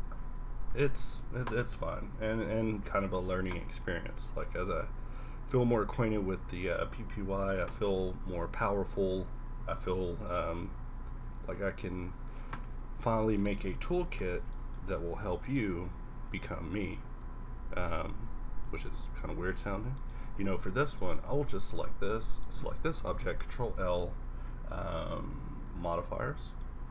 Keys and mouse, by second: 0.1 q, 2.8-4.0 middle drag, 7.9 ctrl+a, 9.7 click, 13.0 a, 15.8 z, 16.2 z, 16.5 q, 19.6 z, 23.1 ctrl+l, 26.2 z, 26.8 a.